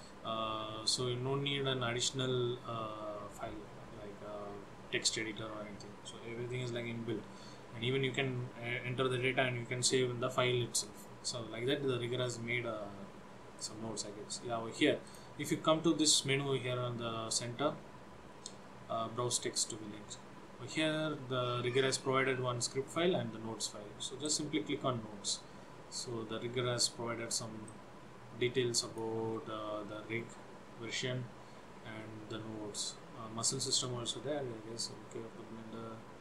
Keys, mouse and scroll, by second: 0.0-3.0 scroll down 3, 13.7 click, 17.2-19.6 scroll down 2, 19.6 click, 27.8 click, 29.6-30.2 scroll up 1, 30.2-30.8 scroll up 5.